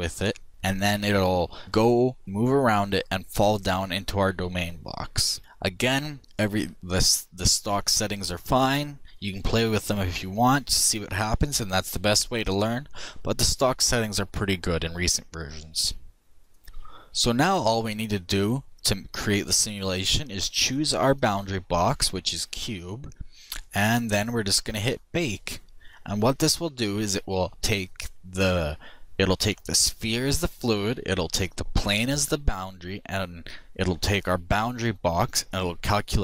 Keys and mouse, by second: 8.1-10.0 drag, 20.0-22.6 drag, 24.2-26.0 drag.